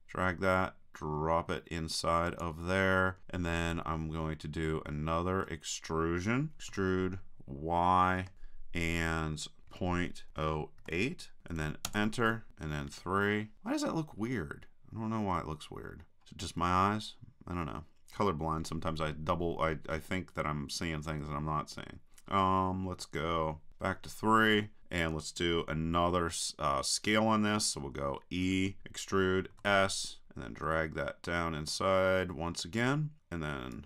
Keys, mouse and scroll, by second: 2.4-4.0 drag, 4.7-6.7 middle drag, 6.7 e, 12.9 KP_3, 14.3 middle click, 16.2 middle click, 16.7-18.3 middle drag, 16.8 click, 23.7 KP_3, 28.5 e.